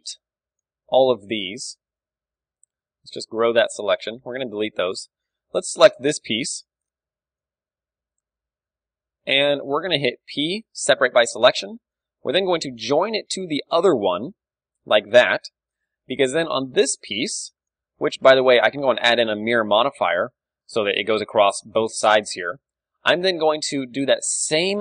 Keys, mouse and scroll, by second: 0.5-3.8 right drag, 1.6 a, 3.0 ctrl+KP_Add, 3.3 ctrl+KP_Add, 3.8-6.1 typing, 8.2 alt+h, 8.8-11.8 super+middle drag, 8.8 z, 10.3 p, 11.2 Tab, 11.4 z, 11.8-15.0 right drag, 14.1 ctrl+j, 14.4 z, 15.0-16.7 middle drag, 15.0 a, 16.7 right click, 17.2 Tab, 17.3-18.7 middle drag, 20.7-24.8 middle drag, 21.3 Tab, 23.1 Tab, 24.0-24.8 right drag.